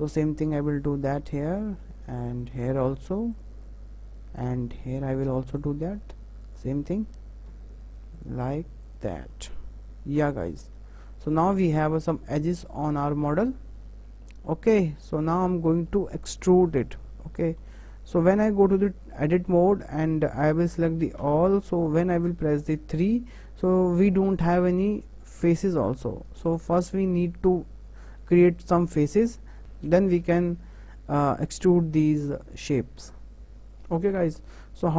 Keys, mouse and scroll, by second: 0.4 shift+click, 1.0 f, 1.6 click, 2.3 shift+click, 2.8 f, 3.3 click, 4.4 shift+click, 4.8 f, 5.6 click, 6.4 shift+click, 7.5 f, 8.1 click, 8.8 shift+click, 10.1 f, 10.4-10.8 scroll down 4, 10.8 middle click, 11.3 Tab, 11.6-13.6 middle drag, 13.6-14.0 scroll up 4, 14.0-17.5 shift+middle drag, 17.6 Tab, 18.6-19.6 middle drag, 19.6 scroll down 2, 20.0-21.2 shift+middle drag, 21.2 a, 22.9 3, 26.1-29.3 middle drag, 29.6-32.9 middle drag.